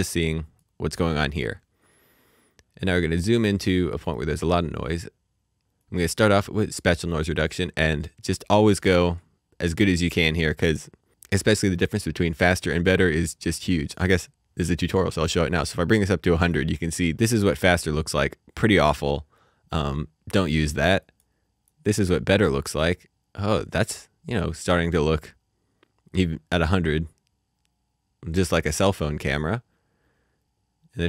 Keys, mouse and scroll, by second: 2.3 click, 2.3-3.6 scroll up 1, 3.7 middle click, 5.8 middle click, 7.1 click, 13.9 click, 21.0 click, 23.4-23.9 scroll down 1, 25.0-26.8 scroll up 1, 28.5-28.9 scroll down 1, 29.1-31.0 scroll up 1.